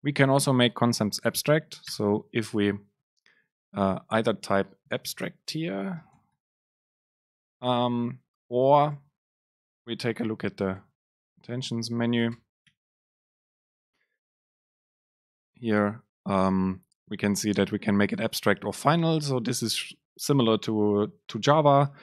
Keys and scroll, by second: 4.5 Home, 8.9 super+Left, 10.9 BackSpace, 12.1 Left, 12.4 BackSpace, 15.4 Up.